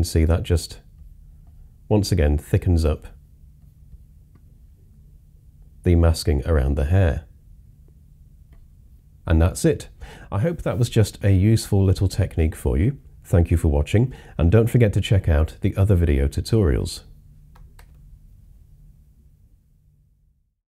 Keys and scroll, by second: 1.6 typing, 3.2 typing, 17.8 super+0.